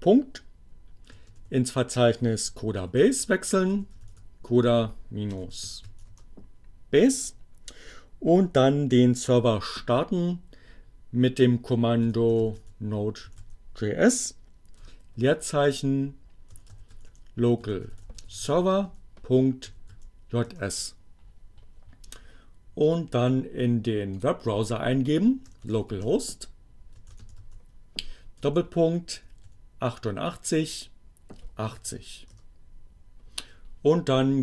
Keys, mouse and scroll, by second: 0.2-1.1 typing, 2.6-6.3 typing, 10.2-11.2 typing, 12.7 e, 13.1 s, 13.6 space, 15.6-19.9 typing, 20.5 Return, 22.9 click, 24.2 click, 25.2-28.9 typing, 30.4-31.3 typing, 34.2 click.